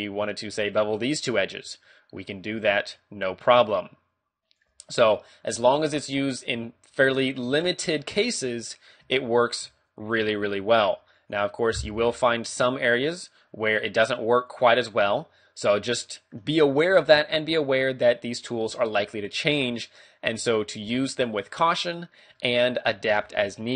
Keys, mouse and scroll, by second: 0.1 shift+right click, 1.0 w, 1.9 middle click, 3.0 shift+click, 5.1 middle click, 5.6 a, 5.9 middle click, 6.3 right click, 7.5 middle click, 8.3 middle click, 9.0 a, 9.4 right click, 10.0 shift+right click, 10.7 w, 12.1 middle click, 14.5 click, 15.1 middle click, 16.7 ctrl+z, 17.0 ctrl+z, 17.4 scroll down 2, 17.6 a, 17.8 middle click, 19.5 middle click, 21.0 middle click, 22.5 shift+middle click, 22.7 shift+middle click, 22.9 scroll up 1, 23.3 shift+middle click.